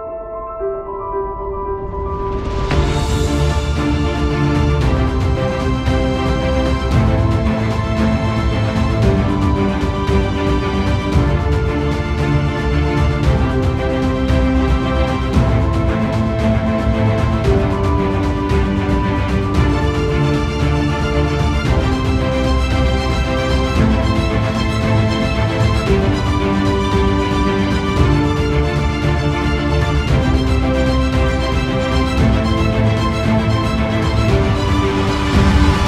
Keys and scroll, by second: 12.2 ctrl+=, 12.9 space, 16.9 ctrl+=, 16.9 space, 21.8 ctrl+alt+z, 32.2 ctrl+-.